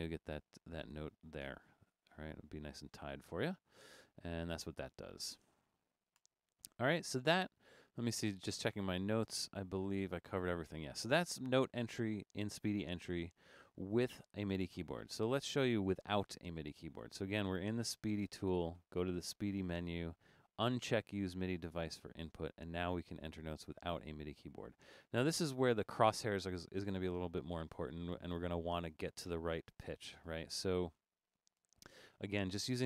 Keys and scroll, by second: 2.7 Escape, 6.2 BackSpace, 29.4 Up, 29.7 Up, 30.2 Up, 31.0 Down, 31.1 Down, 31.6 Down, 32.0 Down, 32.2 Down, 32.5 Down, 32.7 Down.